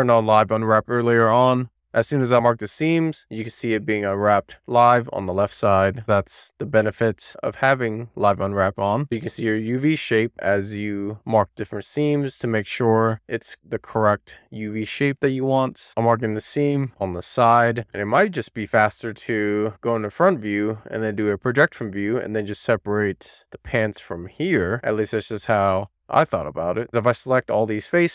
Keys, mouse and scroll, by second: 0.4-1.0 scroll down 1, 1.0-1.8 scroll up 1, 1.8-2.3 scroll down 2, 3.1 middle click, 4.1 shift+middle click, 4.8-5.1 scroll up 1, 5.1-6.3 middle drag, 6.4 middle click, 6.9 shift+middle click, 7.5 middle click, 8.7 middle click, 10.1 click, 12.6-13.1 scroll down 1, 13.1-13.9 scroll up 2, 13.9-15.3 shift+middle drag, 15.7 shift+super+z, 16.0 ctrl+click, 16.2 middle click, 16.7 right click, 17.6 middle click, 18.4 alt+middle click, 19.6 a, 20.4 u, 22.8-25.1 scroll up 2, 25.2 click, 26.4-26.8 scroll up 2, 27.0 click, 27.7 shift+middle click.